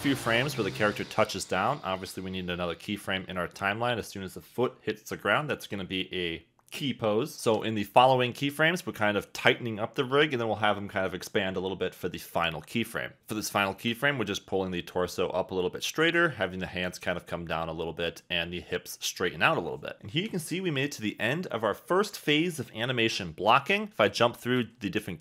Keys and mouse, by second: 0.2 click, 0.3 g, 0.8 click, 0.9 g, 2.3 KP_1, 3.7-7.3 typing, 4.8 click, 8.2 click, 8.4 g, 9.3 click, 9.9 click, 10.0-21.1 typing, 12.6 click, 14.3 click, 15.3 click, 16.5 click, 18.2 click, 20.5 click, 20.7 click, 23.9 space.